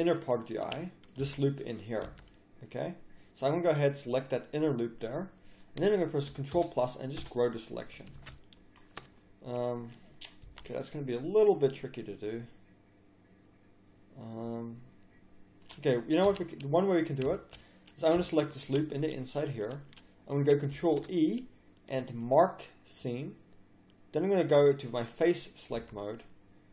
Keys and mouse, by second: 1.3 z, 1.8 middle click, 2.1 z, 6.5 ctrl+KP_Add, 8.3 ctrl+z, 10.4 z, 10.8 middle click, 11.7 middle click, 15.8 middle click, 16.3 a, 17.0 middle click, 18.7 middle click, 20.7 ctrl+e, 24.5-26.5 drag, 25.7 z.